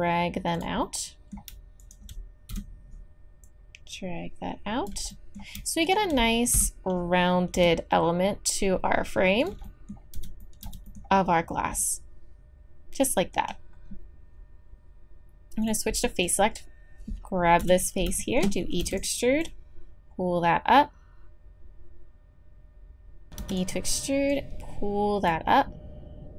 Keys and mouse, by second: 0.9-2.8 drag, 2.5 KP_7, 6.5 KP_7, 7.5 g, 10.1 z, 10.6 z, 12.6-13.8 drag, 15.6 click, 16.2-17.5 middle drag, 17.5 click, 17.6 KP_1, 18.8 e, 21.0-22.0 drag, 23.4 e, 24.3-25.6 drag, 25.6-26.3 middle drag.